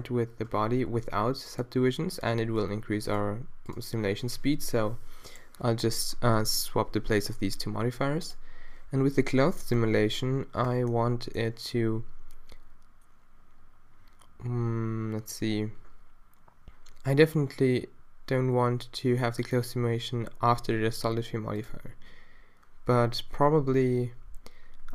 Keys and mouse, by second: 0.6 Tab, 8.3-19.4 drag.